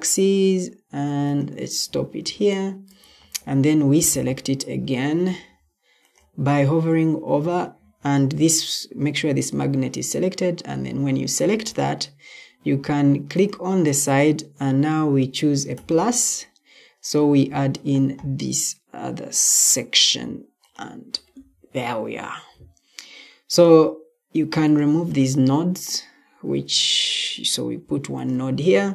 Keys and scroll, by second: 4.7 Escape.